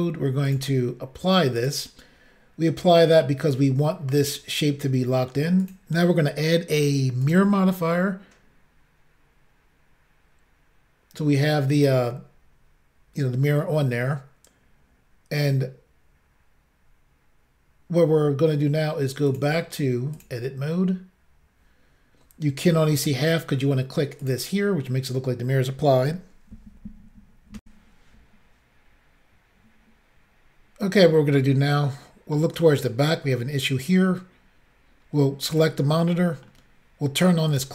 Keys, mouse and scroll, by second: 0.5 click, 0.6 click, 1.6 click, 1.7 click, 5.6 click, 5.7 click, 7.3 click, 7.3 click, 19.3 click, 19.4 click, 20.2 click, 20.2 click, 24.2 click, 24.3 click, 27.6 Insert, 31.4 middle click, 35.5 click, 35.6 click, 36.3 middle click, 37.5 click, 37.6 click.